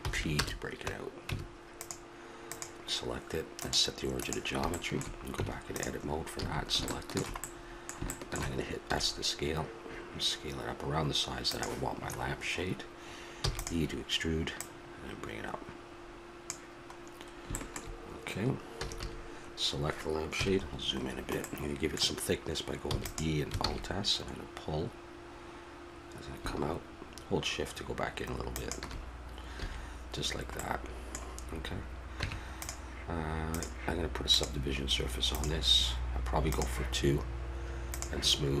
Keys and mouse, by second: 0.0 p, 1.3 Tab, 2.5-4.7 right drag, 4.7 middle click, 5.3 Tab, 6.4 a, 8.8 s, 12.2-14.5 middle drag, 13.4 e, 14.5-16.4 drag, 17.5-20.3 middle drag, 18.7 a, 19.0 a, 20.3 KP_Decimal, 22.9 e, 23.6 alt+s, 29.5 a, 30.9-32.5 middle drag, 32.2 Tab, 32.5-36.3 drag, 36.5-38.6 drag.